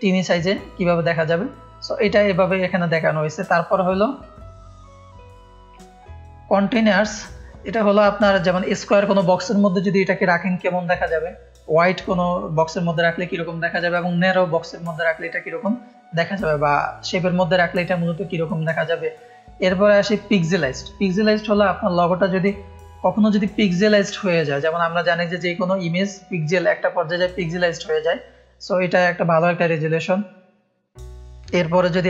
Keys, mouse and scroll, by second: 1.3 scroll down 1, 2.9-3.7 scroll down 2, 5.9 F1, 15.2 scroll down 2, 16.4-16.7 scroll up 2, 18.3-18.9 scroll down 4, 21.7 scroll down 2.